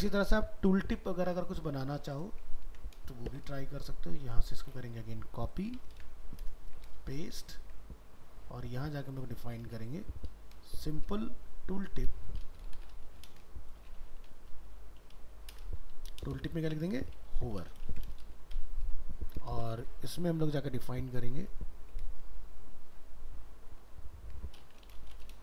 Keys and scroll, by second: 2.7 ctrl+s, 5.9 ctrl+c, 7.3 ctrl+v, 22.2 ctrl+shift+Left, 24.0 ctrl+shift+Right.